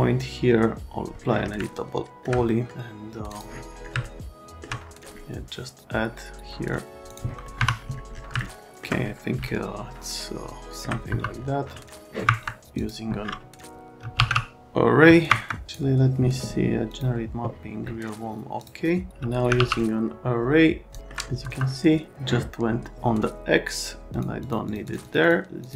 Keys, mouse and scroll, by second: 1.6 alt+middle click, 2.5 middle click, 3.3 click, 4.0 alt+middle click, 7.1 click, 7.4 middle click, 7.5 F3, 10.0 alt+middle click, 11.0 F3, 11.7 alt+middle click, 12.2 Escape, 12.8 click, 13.7-14.7 typing, 15.3 Escape, 15.7 click, 16.9 click, 18.6 click, 19.2 a, 19.6 e, 20.9 middle click, 21.0 right click, 21.4 F3, 24.1 middle click, 24.4 middle click, 24.7 middle click, 24.9 middle click, 25.0 middle click, 25.2 middle click, 25.6 middle click.